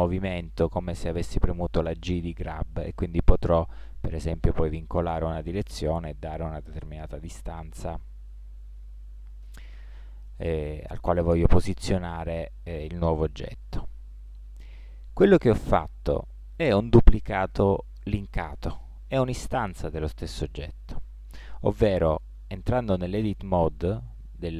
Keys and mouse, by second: 10.2-12.7 middle drag, 14.2 click, 15.1 middle click, 22.8 Tab.